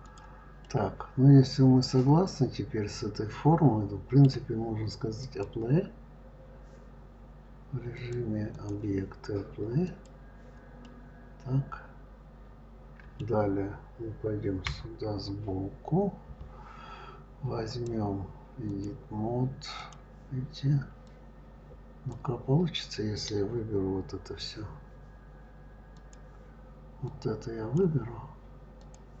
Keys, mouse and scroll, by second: 0.4-3.4 middle drag, 5.0-10.1 drag, 10.6-13.7 middle drag, 14.5 KP_3, 15.4 scroll up 1, 15.6 scroll down 2, 17.4-19.7 drag, 20.8 click, 25.7 click, 26.9 click, 28.6 click.